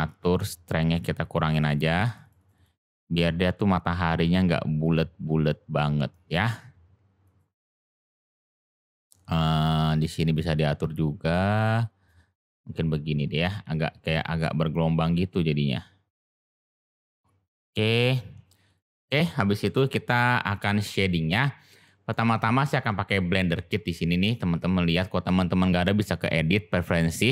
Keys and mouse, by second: 1.3 click, 1.4 click, 1.6 click, 1.7 click, 1.9 click, 2.0 click, 2.2 click, 2.3 click, 2.5 click, 4.9-6.3 drag, 8.2 click, 9.5 drag, 10.6-12.1 drag, 12.4 click, 14.6-16.1 drag, 16.9 click, 18.6 click, 19.6-20.1 middle drag, 21.8 shift+middle click, 26.1-27.3 drag.